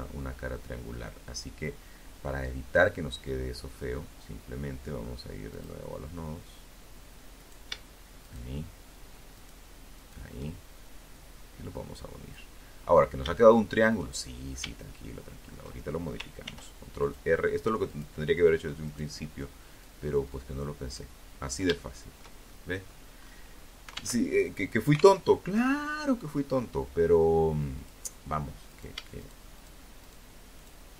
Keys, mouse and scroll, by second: 2.1 scroll down 2, 3.7 click, 5.6 shift+right click, 6.4 shift+right click, 7.5 shift+right click, 8.1 shift+right click, 9.3-10.7 drag, 11.0 scroll up 1, 11.6 shift+middle click, 13.0 shift+middle click, 14.6 ctrl+r, 15.2 ctrl+click, 16.0 click, 17.0 right click, 18.0-19.3 drag, 19.3-19.8 scroll down 1, 19.9 shift+middle click, 20.6 shift+middle click, 21.4 scroll up 1, 21.7-22.0 scroll down 1, 22.4 alt+Tab, 23.4 alt+Tab, 26.0 click, 26.8 shift+right click, 27.4 shift+right click, 27.7 shift+right click, 28.2 shift+right click, 28.7 shift+right click, 29.2 shift+right click, 29.6-30.9 shift+middle drag.